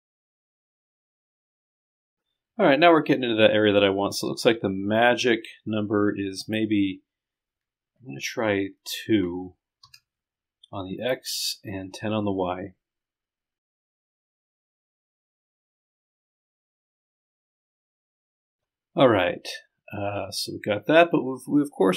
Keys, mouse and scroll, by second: 1.1-2.3 scroll up 2, 6.4 click, 14.0-14.5 scroll up 2, 15.2 scroll down 2, 15.8-17.0 drag, 18.0 scroll down 2, 18.2 scroll up 4.